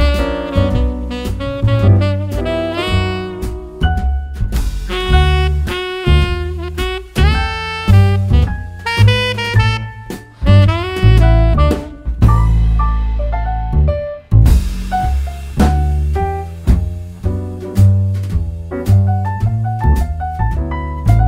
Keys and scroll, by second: 3.1 Page_Down, 3.2 Page_Down.